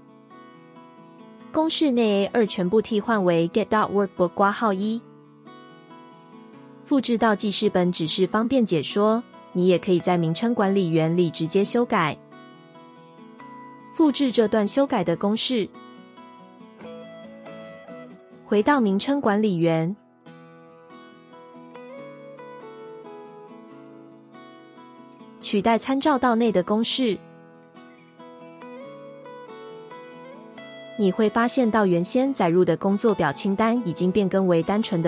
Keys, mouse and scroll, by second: 5.3 typing, 10.2 typing, 13.2 ctrl+c, 25.8 ctrl+v.